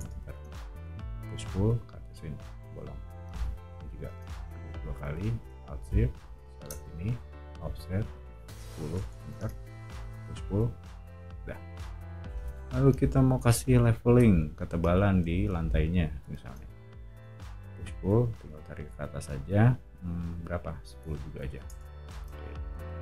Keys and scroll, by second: 0.0-1.0 typing, 2.6 o, 4.1 space, 7.0 f, 8.2-10.0 typing, 11.6 o, 16.4 space, 17.6 p, 21.0-22.1 typing, 21.7 Return, 22.5 Escape, 22.7 Escape, 22.9 Escape.